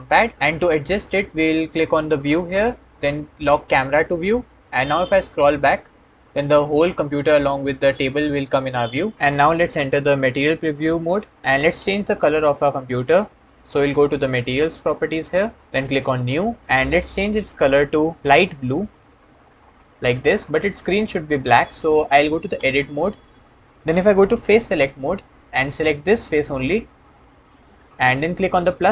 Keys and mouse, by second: 2.0 middle click, 3.5 click, 3.6 middle click, 13.9 click, 15.7-16.6 drag, 17.5 click, 22.4 Tab, 24.4 3.